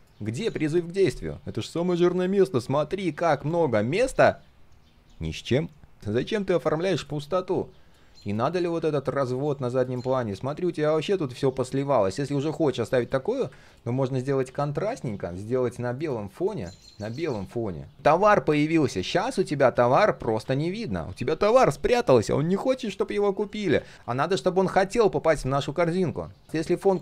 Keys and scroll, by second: 14.5 ctrl+\, 19.3 ctrl+z, 23.5 ctrl+shift+z.